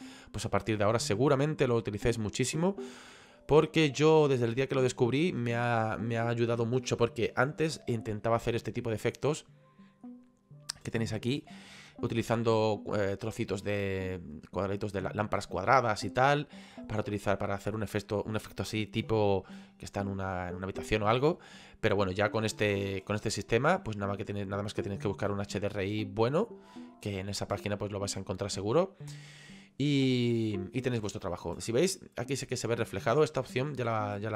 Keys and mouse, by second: 9.3 middle click, 11.9 middle click, 15.7 middle click, 16.9 middle click, 19.2 shift+middle click, 22.4 middle click, 27.4 middle click, 31.5 middle click, 32.8 middle click.